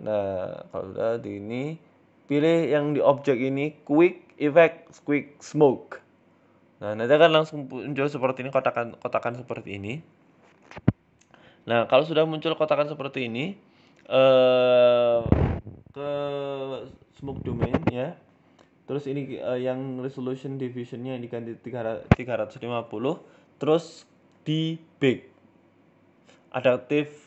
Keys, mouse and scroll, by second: 0.0 middle click, 0.4 s, 1.3 click, 2.6 click, 8.9 ctrl+s, 10.3 scroll down 3, 12.8 click, 14.8 click, 15.6 BackSpace, 20.9 right click, 20.9 h, 21.0 scroll down 7, 21.1 click, 21.3 click, 21.3-23.6 scroll up 7, 27.1 shift+middle click.